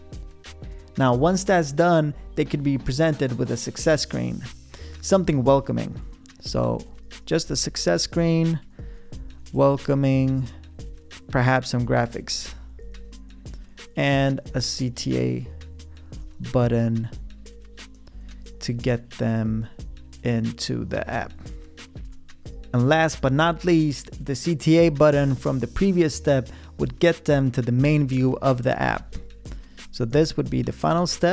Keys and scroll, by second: 5.7-10.5 typing, 11.7-21.2 typing, 28.9-30.9 typing.